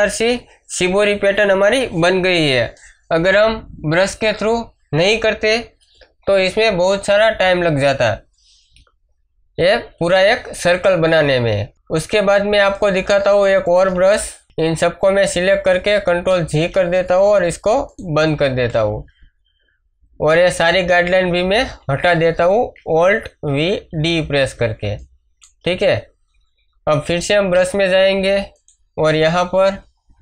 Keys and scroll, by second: 11.7 ctrl+Tab, 16.3 ctrl+g, 21.6 ctrl+d, 23.4 alt+v.